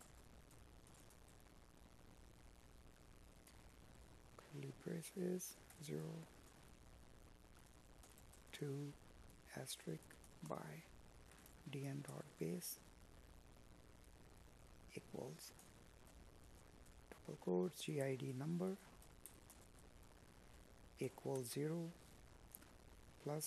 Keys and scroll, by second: 0.4 space, 1.2 space, 2.6 space, 3.3 space.